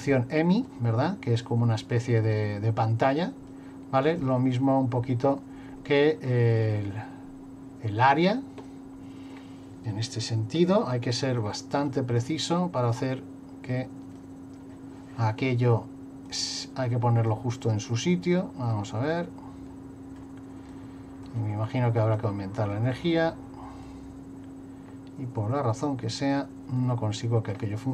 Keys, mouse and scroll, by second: 0.7 click, 4.2 click, 6.4 middle click, 8.6 middle click, 10.8 middle click, 11.8 middle click, 13.0 click, 16.3 click, 17.3 click, 18.9 middle click, 20.7 click, 22.2 click, 26.9 middle click.